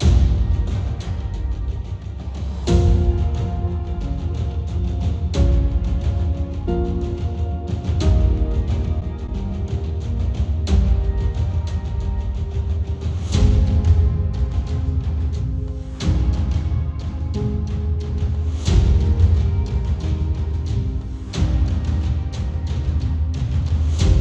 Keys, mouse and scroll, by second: 4.2-6.3 middle drag, 4.2 KP_0, 6.3-9.4 drag, 11.4-19.2 drag, 19.2-20.4 middle drag, 20.4-24.2 drag.